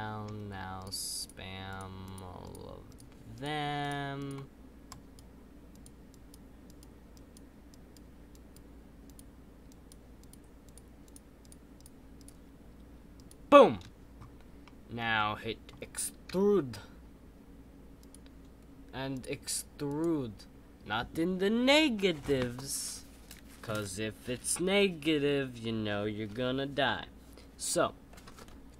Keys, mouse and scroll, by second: 0.8 shift+click, 14.6-16.3 middle drag.